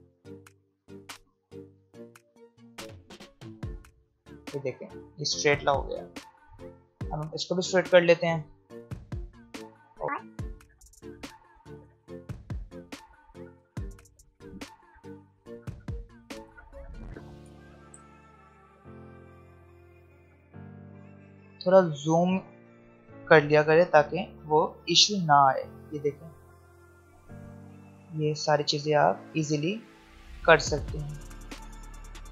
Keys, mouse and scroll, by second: 0.3-1.2 scroll up 1, 1.2 click, 1.9-2.4 alt+scroll down 1, 4.1-4.7 alt+scroll up 1, 5.9-6.9 alt+scroll up 1, 8.6 click, 10.9 alt+scroll down 1, 11.8 v, 12.2 click, 13.6-14.3 alt+scroll down 2, 14.3 alt+scroll up 1, 14.5 alt+scroll down 1, 14.8 space, 15.0 click, 15.1 space, 15.4 alt+scroll up 2, 16.0 alt+click, 16.5 s, 17.4 p, 19.0 click, 20.8 alt+scroll up 1, 22.5 click, 23.2-24.6 alt+scroll down 1, 24.6 alt+scroll up 1, 27.3 click, 27.8 alt+scroll down 1, 29.3 alt+scroll up 1, 31.1 click, 31.6 alt+scroll down 1.